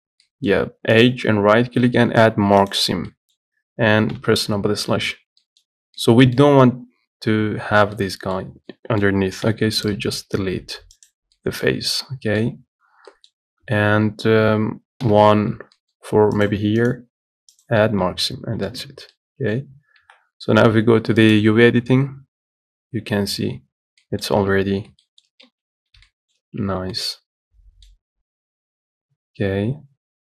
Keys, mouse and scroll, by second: 0.0 z, 0.5-2.9 middle drag, 2.9 right click, 3.3-4.4 middle drag, 4.4 KP_Divide, 5.2 middle click, 5.3 scroll down 2, 5.7-9.7 middle drag, 9.7 3, 10.1 click, 11.3 x, 11.6 middle click, 11.9 scroll up 2, 12.3 middle click, 12.8-13.1 scroll up 1, 13.1 scroll down 2, 13.3-15.3 middle drag, 15.3 2, 16.0 middle click, 16.7 click, 17.8 right click, 18.2 Tab, 18.5 middle click, 19.0 Tab, 19.4 middle click, 20.2 a, 21.5 click, 22.2-22.5 scroll down 1, 24.0 scroll up 3, 24.6 middle click, 25.0 z, 25.3 shift+middle click, 25.7 Tab, 26.0-26.3 scroll up 1, 26.3 shift+middle click, 26.8 Tab, 27.2-30.3 middle drag.